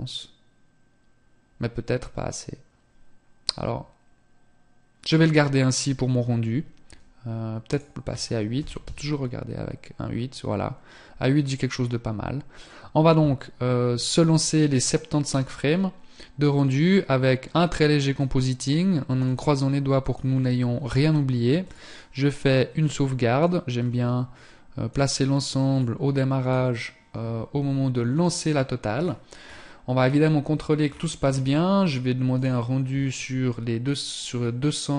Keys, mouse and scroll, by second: 6.8 click, 18.4 click, 20.8 click, 24.9 click, 28.1 scroll up 1, 30.0 scroll down 3, 30.9 scroll down 7, 31.5 click.